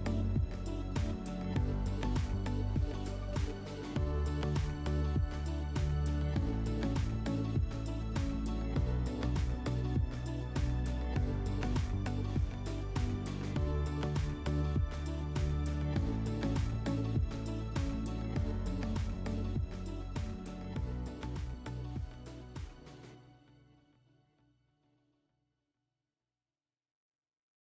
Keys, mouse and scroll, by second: 3.1 click, 4.0 click, 8.2 click, 10.0 middle click, 11.0 click, 11.3 scroll.